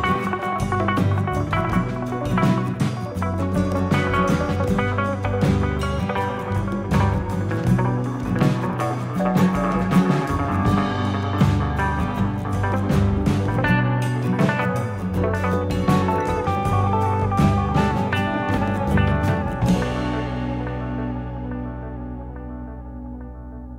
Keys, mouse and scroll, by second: 0.6 shift+click, 1.0 shift+click, 1.0 middle click, 2.3 click, 2.9 shift+middle click, 3.6 middle click, 4.3 click, 5.5 ctrl+z, 5.9 middle click, 6.5 middle click, 6.6 shift+middle click, 6.9 shift+middle click, 7.3-8.0 scroll up 2, 8.4 z, 9.6 click, 9.9 middle click, 11.1 shift+click, 11.9 z, 13.4 click, 15.3 z, 15.5 middle click, 17.3 click, 18.8 click, 19.4 click, 22.3 scroll down 3, 22.6 middle click.